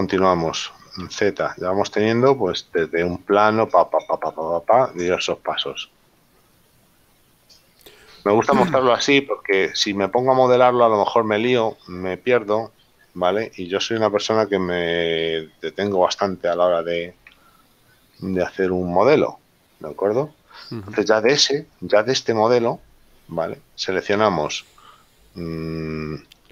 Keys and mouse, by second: 0.7 middle click, 1.3 z, 2.7 shift+middle click, 4.8 shift+middle click, 8.4 click, 17.5 Tab, 18.5 shift+middle click.